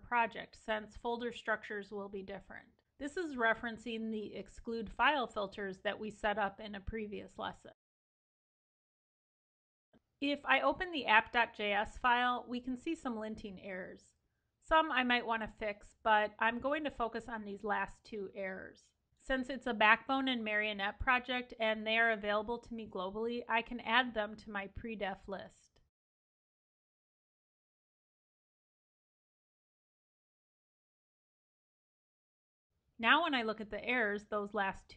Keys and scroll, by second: 8.0 Escape, 32.3 super+s.